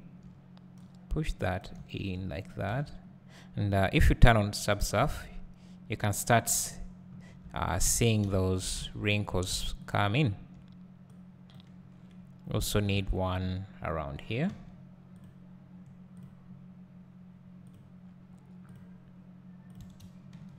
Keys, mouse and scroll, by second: 0.8-10.0 drag, 1.8 `, 2.8 Tab, 4.5 ctrl+2, 6.2 `, 7.6 Tab, 8.0 Tab, 8.3 `, 8.9 Tab, 10.3 `, 11.2-20.5 drag, 13.0 alt+a, 14.5 k.